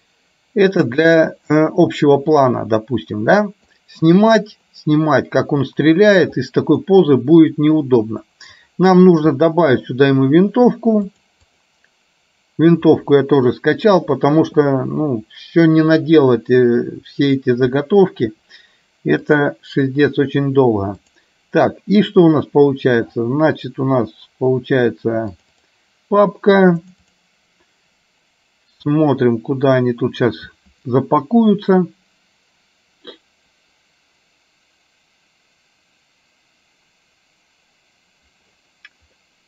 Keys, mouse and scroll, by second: 1.6-3.8 middle drag, 4.8-6.3 middle drag, 6.9-8.5 middle drag, 9.4-11.1 drag, 11.8-19.6 drag, 39.3-39.4 middle drag.